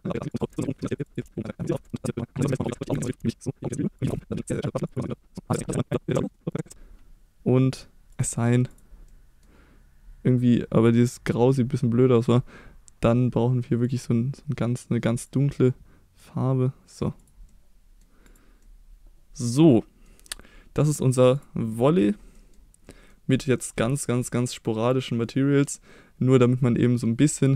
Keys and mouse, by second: 0.4 shift+middle click, 0.9 click, 1.1 click, 1.4 click, 1.8-2.2 shift+middle drag, 2.2 click, 2.7 Tab, 2.8 middle click, 2.9 KP_1, 3.2 c, 3.7 click, 4.6 click, 5.6 c, 6.0 middle click, 6.3 middle click, 8.7 click, 9.1 middle click, 10.8 click, 17.2 click, 17.5 middle click, 18.2 click, 18.6-20.0 middle drag, 20.8 middle click, 21.3 click, 21.7 middle click, 22.3 middle click, 22.9 middle click, 23.6 middle click, 24.2-25.6 middle drag, 27.3 middle click.